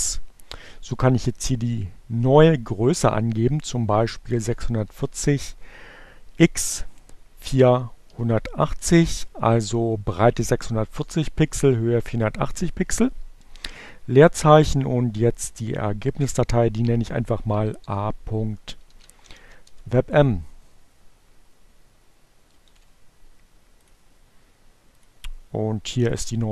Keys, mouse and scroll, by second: 3.3-4.3 typing, 6.1 4, 6.4 0, 11.3 space, 16.1-17.3 typing, 18.9 m, 19.1 Return, 23.5 ctrl+c, 24.6 click, 25.8 click.